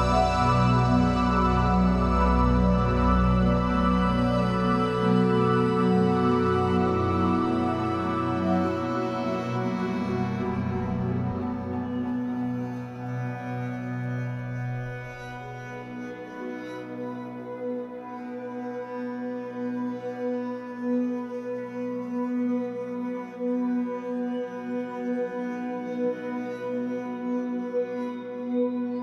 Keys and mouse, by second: 2.0-3.1 drag, 3.7 ctrl+alt+shift+click, 4.2-5.6 ctrl+alt+drag, 5.7-7.6 alt+drag, 8.0 alt+click, 9.5-11.8 drag, 14.4-15.9 drag, 16.4 click, 17.7-20.7 drag, 24.4 ctrl+s, 25.0 ctrl+alt+click, 25.6-27.4 alt+drag.